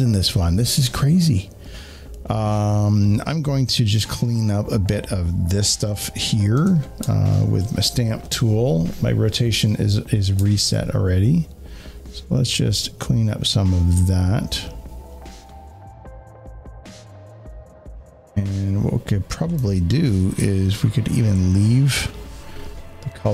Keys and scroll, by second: 19.5 space, 19.6 space.